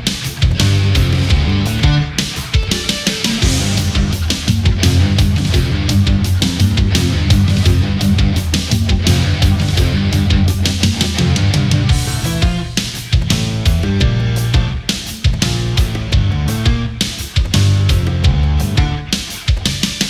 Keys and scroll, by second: 14.9 space.